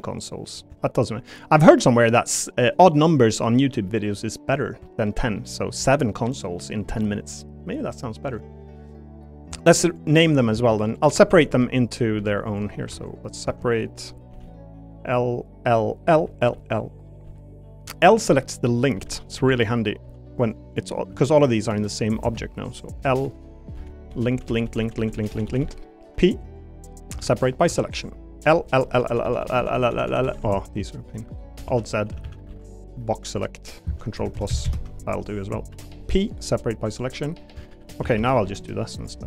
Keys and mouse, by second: 0.0 middle click, 0.8 shift+middle click, 4.8 shift+middle click, 5.4 middle click, 10.5 Tab, 11.3 l, 12.2 p, 12.9 Tab, 13.1 click, 13.4 Tab, 14.3 l, 15.7 l, 16.2 l, 16.5 l, 17.2 l, 17.9 click, 18.9 l, 19.4 l, 20.0 p, 20.8 click, 21.1 Tab, 21.3 click, 22.3 Tab, 23.2-26.0 typing, 26.9 click, 27.1 Tab, 27.4 click, 27.7 Tab, 28.4-30.4 typing, 31.2 middle click, 31.7 alt+z, 32.1 a, 32.2 a, 32.5 b, 34.2 ctrl+KP_Add, 34.3 ctrl+KP_Add, 34.5 ctrl+KP_Add, 34.6 ctrl+KP_Add, 35.7 p, 36.6 p, 37.6 shift+click, 38.0 a, 38.2 a, 38.4 b.